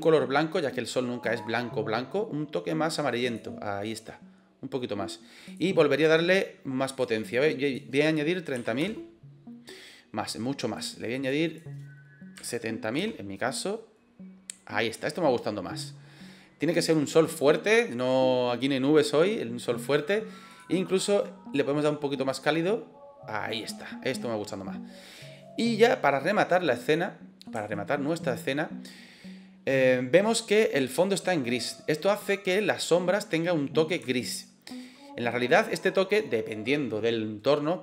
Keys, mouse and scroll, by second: 1.1 click, 5.4-10.0 drag, 10.6-15.2 drag, 20.4 click, 26.8 middle click, 27.7 shift+middle click, 28.1 middle click, 30.7 middle click, 31.9 click, 32.1 middle click, 32.7 click, 34.0-34.6 shift+middle drag.